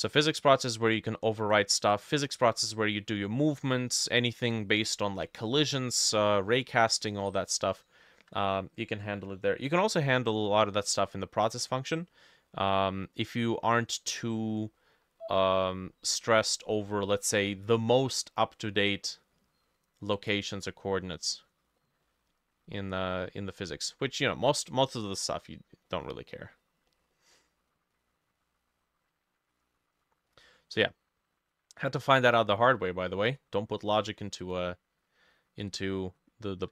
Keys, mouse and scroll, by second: 2.9 middle click, 5.2 middle click, 5.9 middle click, 7.5 middle click, 11.9 middle click, 15.3 middle click, 16.7 middle click, 17.3 middle click, 18.0 middle click, 18.6 middle click, 19.2 middle click, 20.1 middle click, 20.2 right click, 21.1 middle click, 22.1 middle click, 23.1 middle click, 23.9 middle click, 24.7 middle click, 25.2 middle click, 25.9 middle click, 26.4 middle click, 27.4 middle click, 28.0 middle click, 30.3 middle click, 31.9 middle click, 33.1 middle click, 35.0-35.7 scroll down 2, 35.7 middle click.